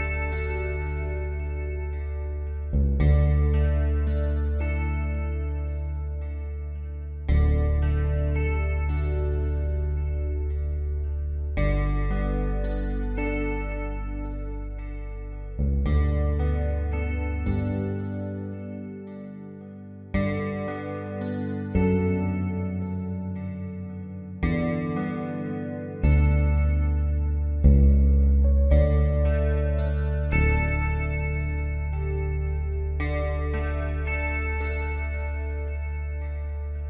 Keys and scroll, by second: 11.4 space, 12.8 space, 19.7 space, 21.1 space, 23.7 space, 27.1 space, 30.2 space, 32.7 space, 34.5 ctrl+z, 35.7 space, 36.4 space.